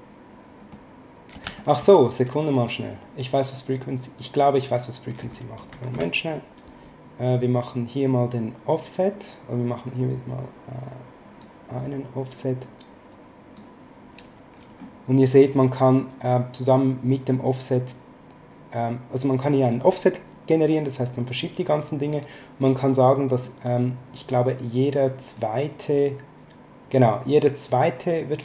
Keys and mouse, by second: 0.7 middle click, 1.5 shift+middle click, 2.7 click, 5.1 click, 5.7 KP_1, 5.9 Return, 5.9 KP_Enter, 8.0 click, 11.8 click, 16.1 click, 23.3 click, 25.3 click.